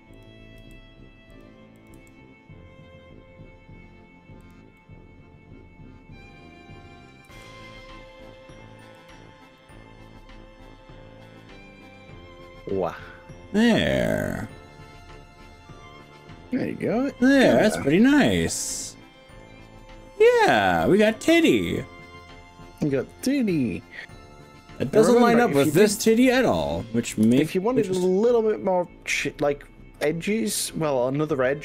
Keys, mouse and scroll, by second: 0.2 click, 0.6 g, 1.8 click, 2.0 g, 4.4 drag, 4.8-7.2 middle drag, 7.4 g, 9.0 click, 9.6-19.4 middle drag, 11.0 click, 19.8-22.4 middle drag, 23.1 KP_3, 27.1 KP_1.